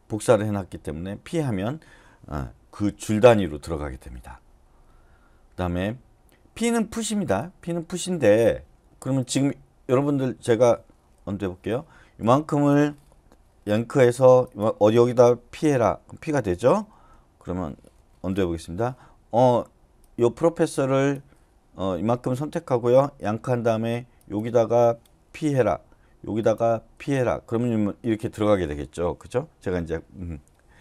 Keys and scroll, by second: 11.2 u, 13.8 y, 15.5 p, 16.9 y, 17.9 Escape, 18.4 u, 23.2 y, 25.4 p.